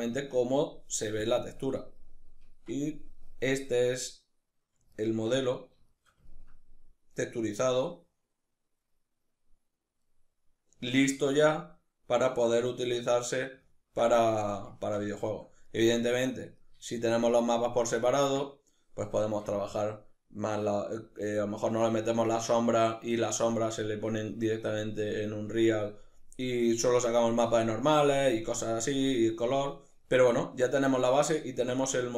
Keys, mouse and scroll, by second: 0.6-1.3 drag, 1.3-32.1 middle drag.